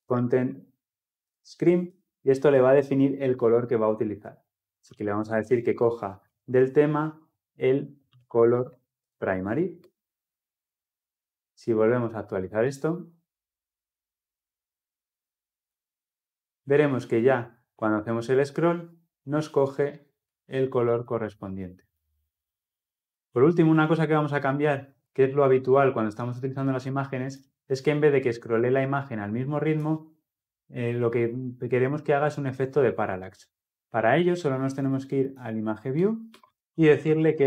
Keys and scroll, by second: 1.6 Return, 9.6 Return, 12.4 ctrl+F10.